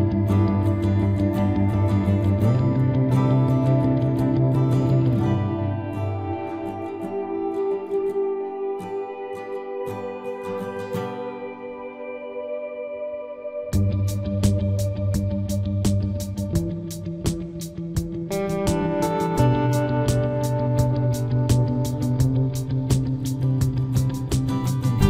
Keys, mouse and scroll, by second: 0.0 middle click, 0.3 b, 2.4 g, 6.1 right click, 7.9 ctrl+s, 11.7-15.6 middle drag, 21.3 ctrl+r, 23.0-24.9 right drag, 24.3 c.